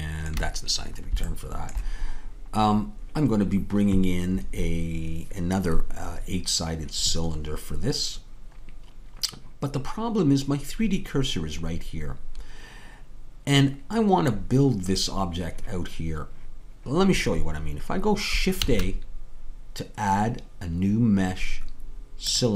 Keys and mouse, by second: 18.6 shift+a.